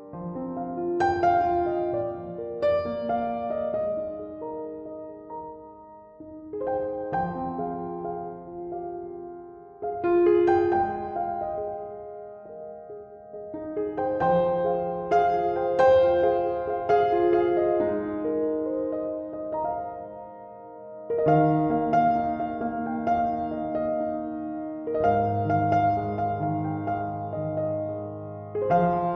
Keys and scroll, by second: 28.4 typing.